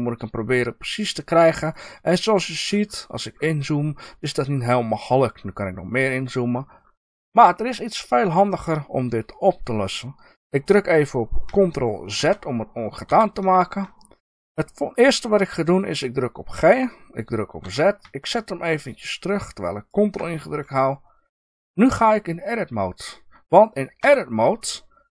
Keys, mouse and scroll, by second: 1.6 ctrl+click, 2.7 scroll up 1, 4.4-5.0 scroll down 2, 5.0 scroll up 1, 6.4 scroll down 1, 12.1 ctrl+z, 16.3 g, 19.9 ctrl+click, 23.9 Tab.